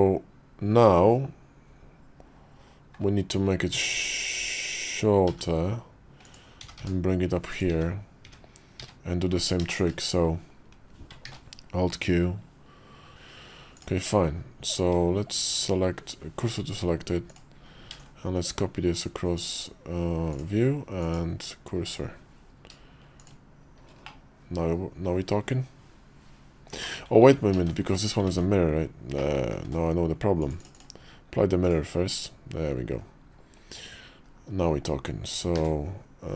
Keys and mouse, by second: 3.6 s, 6.4 g, 7.6 `, 8.1 `, 8.6 `, 9.6 shift+click, 11.1 ctrl+q, 13.6 click, 15.5 shift+s, 17.9 alt+x, 19.2-20.5 drag, 20.9-22.0 drag, 23.1 shift+click, 23.9-26.6 drag, 28.1 ctrl+z, 29.0 click, 29.4 ctrl+`, 30.5-31.6 drag, 31.9 `, 32.8 KP_5, 34.1 KP_5, 35.4 ctrl+q.